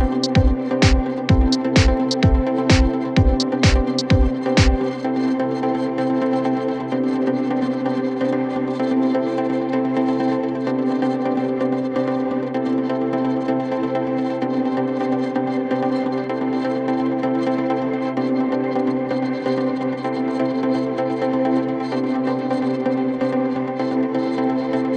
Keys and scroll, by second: 7.9 ], 8.9 ], 9.3 ctrl+z, 12.4 4, 13.9 3, 15.9 ], 19.2 4, 20.3 3, 24.4 4.